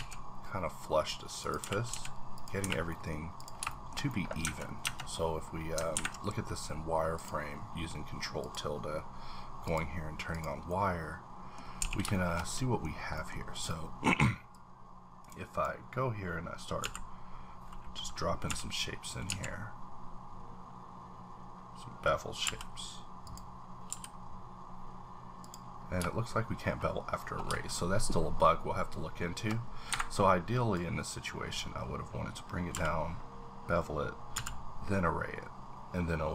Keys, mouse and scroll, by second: 1.6 click, 1.6 g, 1.9 z, 2.3 click, 2.6 h, 2.9 middle click, 3.4 click, 3.7 shift+middle click, 4.4 Tab, 4.8 Tab, 6.1 ctrl+`, 7.1 click, 8.4 click, 9.6 click, 10.3 click, 10.7 middle click, 11.6 scroll up 1, 11.8 a, 12.1 shift+middle click, 12.9 scroll down 2, 13.1 middle click, 13.5 click, 14.5-18.4 drag, 16.8 v, 18.4 y, 19.2 x, 20.5-21.9 scroll up 3, 22.4 b, 23.2 click, 23.9 b, 25.4 click, 29.9 Escape, 30.7-34.3 drag, 32.7 b, 34.3 v.